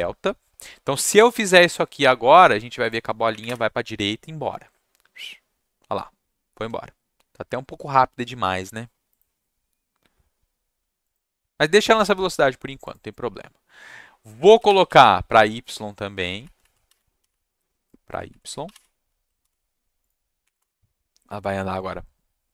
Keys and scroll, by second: 0.0-0.3 typing, 1.1 ctrl+shift+s, 3.3 Up, 3.4 Return, 14.6 ctrl+shift+Down, 14.8 Left, 16.4 Right, 16.6 Right, 17.2 y, 18.2 Right, 18.7 y, 19.4 ctrl+s, 20.4 Up, 20.5 Return.